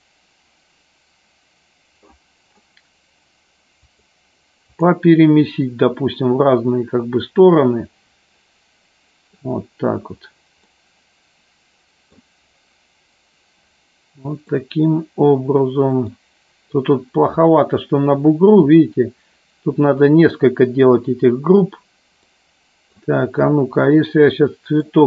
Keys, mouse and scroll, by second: 4.8 click, 7.4-9.6 middle drag, 10.7-12.4 middle drag, 14.7-16.3 middle drag, 22.3-23.1 middle drag, 24.0-24.8 middle drag.